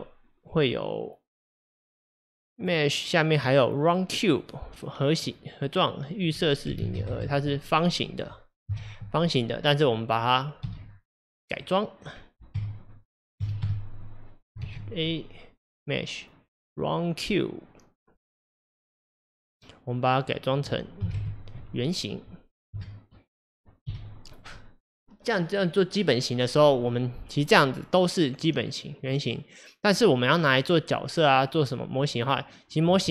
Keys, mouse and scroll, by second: 6.3-8.7 drag, 8.7 KP_Divide, 9.6-10.6 scroll down 5, 10.6 x, 12.1-12.6 scroll down 3, 12.6 KP_0, 13.5 KP_Divide, 13.7 KP_0, 14.7 shift+a, 20.6-22.8 drag, 22.8 KP_0, 23.9 g, 26.8 click, 27.5 click, 28.3 click, 28.9 click, 30.4 click, 32.1 click.